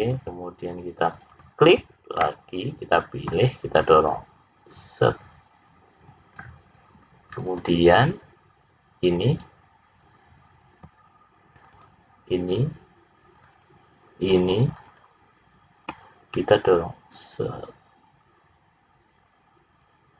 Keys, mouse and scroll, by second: 0.0 click, 1.1 click, 1.3 click, 2.1 middle click, 4.0 click, 7.2 click, 7.6 click, 11.5 shift+click, 11.8 shift+click, 13.2 shift+click, 13.5 shift+click, 14.6 shift+click, 14.9 shift+click, 16.4 click.